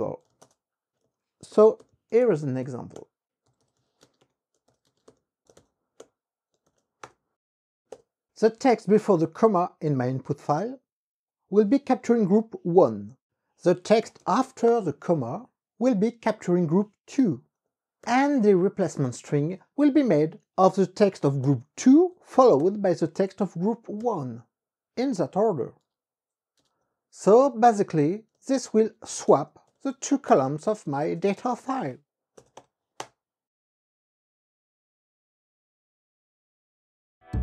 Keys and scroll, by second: 0.3-6.8 typing, 0.5 Return, 7.2 KP_Add, 8.0 ), 8.3 ,, 14.1 (, 14.4 shift+;, 14.8 KP_Add, 15.2 ), 21.9 KP_2, 22.3 ,, 23.2 KP_1, 25.6 ', 26.7-32.6 typing, 28.1 Tab, 32.7 KP_Multiply, 33.1 KP_Enter.